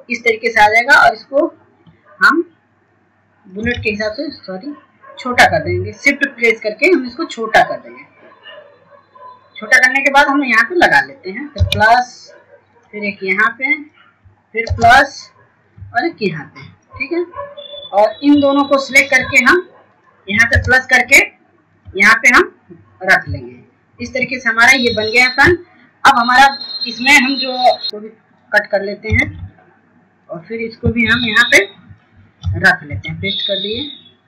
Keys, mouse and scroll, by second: 1.4 KP_4, 2.9-3.9 scroll up 1, 3.9-4.6 scroll down 1, 4.6 scroll up 1, 5.9 shift+click, 7.8 shift+click, 10.3 scroll up 1, 11.1 scroll down 1, 12.4-20.1 drag, 20.1-20.7 scroll down 1, 20.7 scroll up 1, 21.9-26.6 drag, 26.6-27.0 scroll down 1, 27.0 click, 27.4-27.8 scroll down 1, 28.9-29.4 scroll down 1, 29.4-30.0 scroll up 1, 30.0 click, 33.3 click, 34.1 F2.